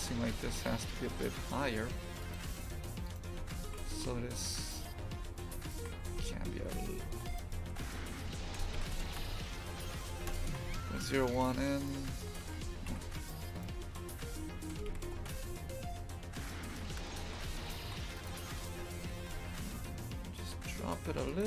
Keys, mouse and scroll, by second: 0.6 g, 3.0 right click, 3.6 shift+f, 5.6 shift+right click, 6.0 shift+f, 7.6 g, 10.4 shift+f, 11.7 right click, 12.3 g, 13.5 shift+right click, 14.2 g, 17.2 shift+f, 18.5 right click, 19.0 g.